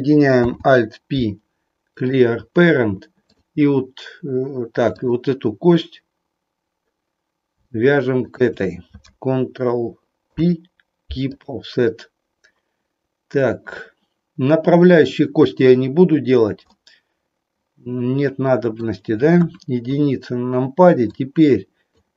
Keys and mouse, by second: 0.3 alt+p, 4.9 click, 10.2 ctrl+p, 16.7-18.8 middle drag, 19.3 KP_1, 21.2 click.